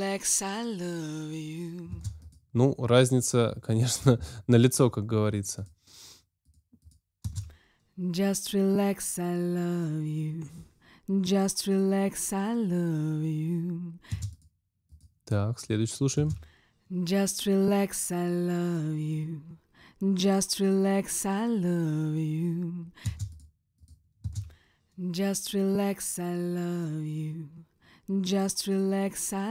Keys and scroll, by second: 1.9 space, 7.2 space, 14.1 space, 16.1 space, 23.0 space, 24.1 space.